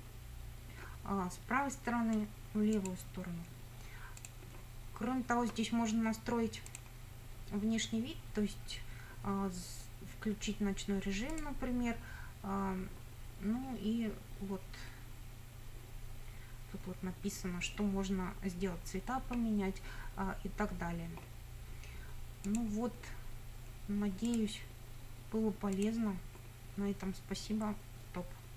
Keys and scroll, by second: 17.1 alt+a, 17.1 alt+b.